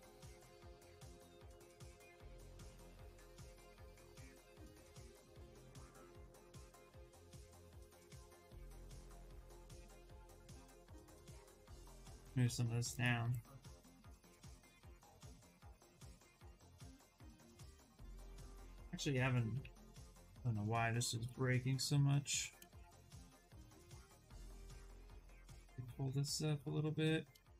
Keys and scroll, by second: 2.7 shift+f, 3.0 shift+f, 6.9 ctrl+z, 7.1 ctrl+z, 10.0 ctrl+z, 10.2 s, 17.1 ctrl+z, 17.6 ctrl+z, 18.9-20.2 typing, 21.3 2, 23.1 shift+d, 23.4 s.